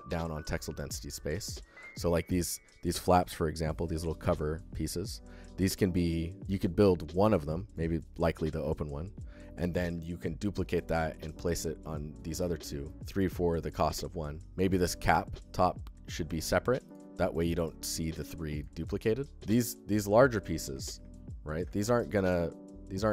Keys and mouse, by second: 0.4-1.0 alt+shift+middle drag, 2.2 alt+shift+middle click, 7.3 alt+shift+middle click, 7.8 alt+middle click, 12.3 alt+middle click, 12.7 alt+shift+middle click, 18.4-18.9 alt+shift+middle drag, 19.1 alt+middle click, 21.5 alt+shift+drag, 21.9 alt+click.